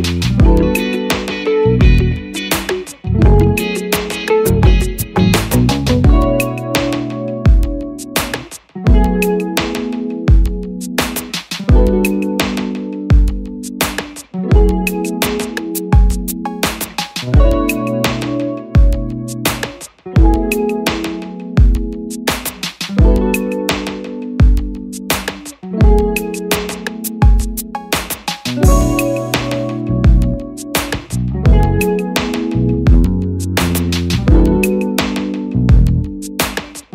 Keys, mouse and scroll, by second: 16.1 ctrl+-, 28.9 ctrl+-.